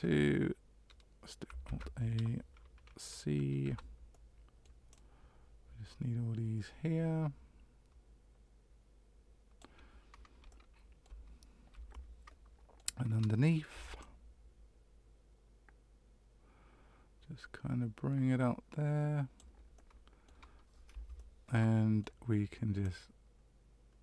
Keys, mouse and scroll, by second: 1.6 alt+a, 3.6 c, 11.9 middle click, 13.7 c, 21.1 middle click, 22.8 click.